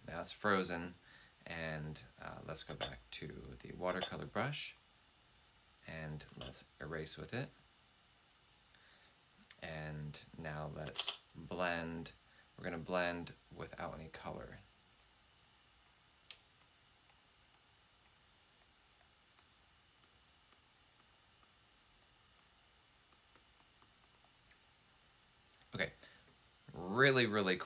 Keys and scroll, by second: 2.6 F8, 3.7 F8, 6.2 5, 10.8 typing.